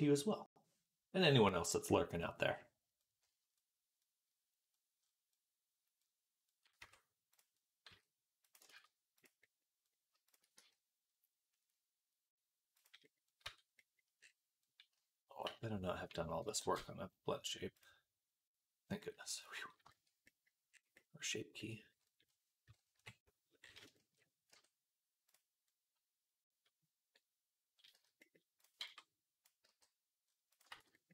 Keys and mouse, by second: 4.2 click, 6.7 Tab, 7.7 s, 8.6 ctrl+z, 9.7-15.3 middle drag, 10.4 s, 13.3 Tab, 15.3-31.1 drag, 15.3 n, 15.8 n, 16.6 ctrl+space.